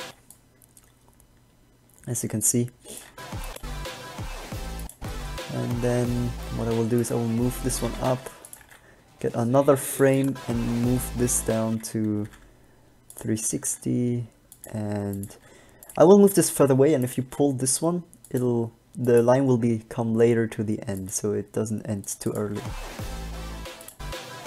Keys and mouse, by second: 0.2 alt+a, 3.3 alt+a, 5.9 middle click, 7.3 g, 8.1 shift+d, 8.9 g, 11.9 alt+a, 12.4 g, 13.3-15.0 drag, 13.7 g, 15.5 g, 17.3 g, 21.3 g, 22.6 alt+a.